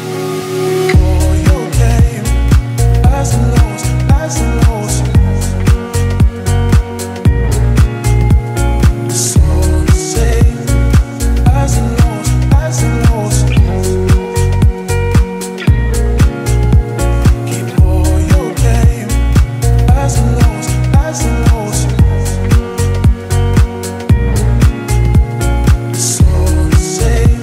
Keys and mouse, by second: 1.0 alt+middle click, 6.0 alt+middle click, 7.2 middle click, 8.0 middle click, 13.2 middle click, 13.7 middle click, 15.1 alt+middle click, 16.8 alt+middle click.